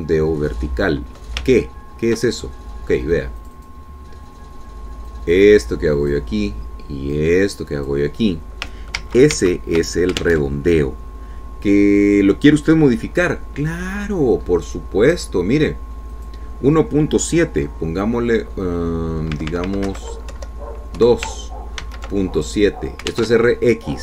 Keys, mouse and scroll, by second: 0.7 alt+Tab, 3.0-3.6 ctrl+scroll up 2, 3.9 ctrl+click, 4.9 click, 6.6-7.8 drag, 8.6 click, 10.5 ctrl+z, 11.8 alt+Tab, 15.9 scroll up 1, 17.6 click, 20.9 Left, 21.4 Right, 21.8 Delete, 22.5 KP_2, 23.3 ctrl+s.